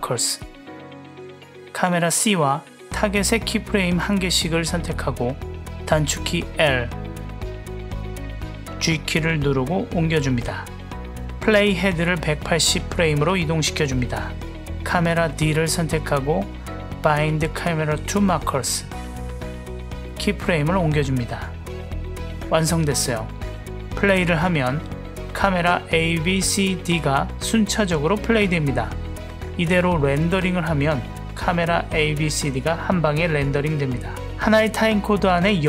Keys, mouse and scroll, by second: 4.2-4.8 drag, 6.1 l, 7.8 g, 11.6-13.6 drag, 14.8 click, 16.4-18.2 drag, 19.7 click, 20.2 l, 21.0 g, 23.5-24.2 drag, 24.3 space, 29.4 space, 30.2 click, 30.9 ctrl+alt+q, 32.4 click, 32.5 space.